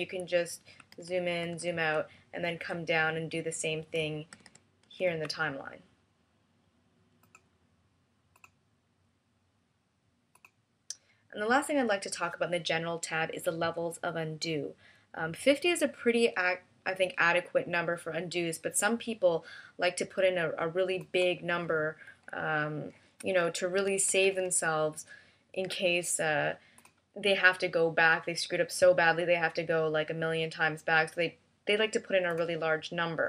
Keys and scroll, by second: 1.3 super+=, 4.2 super+=, 4.7 super+-, 23.7 3, 24.0 0, 25.5 BackSpace, 26.0 BackSpace.